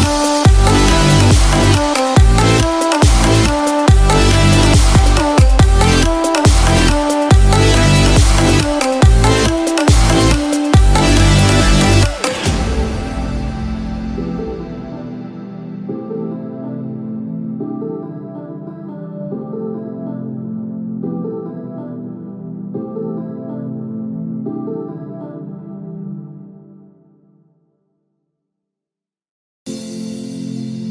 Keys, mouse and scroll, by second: 0.4 shift+s, 5.2 i, 11.2 click.